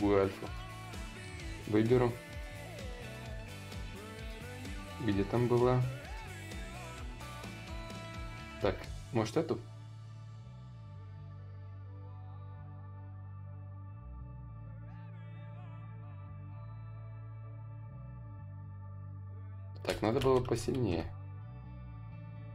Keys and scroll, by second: 18.0 space, 19.9 ctrl+z, 20.1 ctrl+z, 20.7 ctrl+z, 21.3 ctrl+z, 22.0 ctrl+z.